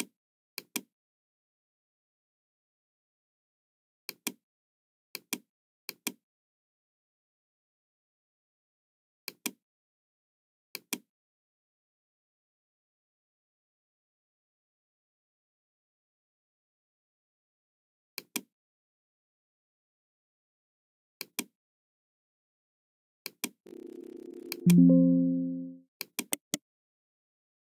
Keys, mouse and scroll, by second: 0.5 click, 3.9 Return, 3.9 KP_0, 3.9 KP_1, 4.0 click, 5.0 click, 5.8 click, 6.5 KP_7, 7.1 KP_5, 7.1 KP_Decimal, 7.9 Return, 9.1 click, 10.3 Return, 10.3-10.8 typing, 10.7 click, 10.8 Return, 16.6-17.0 scroll up 1, 18.1 click, 21.2 click, 23.1 click, 24.4 click, 26.0 click, 26.2 right click.